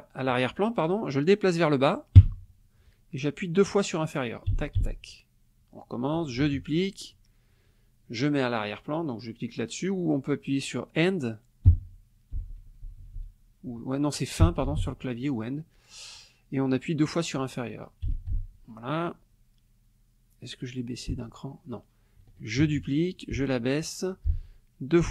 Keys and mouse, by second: 2.2 Down, 4.5 <, 6.4 ctrl+d, 11.7 Page_Down, 12.3 Page_Down, 14.4 End, 18.1 <, 21.1 Down, 22.6 ctrl+d, 23.3 Down, 25.0 <.